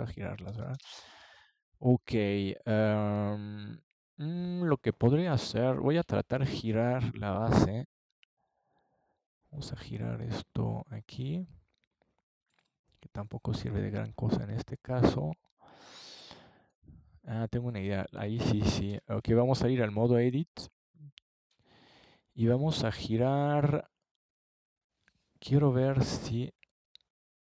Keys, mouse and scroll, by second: 0.2 Tab, 1.7 KP_3, 3.6 KP_1, 6.8 r, 9.5-11.0 drag, 11.0 Tab, 11.6-12.8 middle drag, 15.3 Tab, 17.3 KP_3, 19.1 KP_1, 21.8 r, 23.7-25.1 drag, 26.7 Tab.